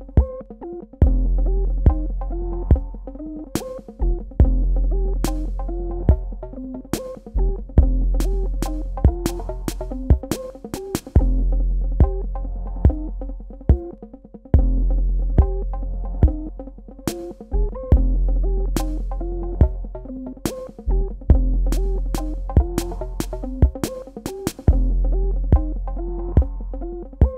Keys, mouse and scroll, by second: 0.7 click, 4.2 click, 5.3 super+KP_Add, 8.5 KP_Subtract, 9.7 click, 15.5 Tab, 18.2 click, 19.8 shift+Left, 21.1 shift+Right, 21.6 Left, 22.7 Up, 24.7 click.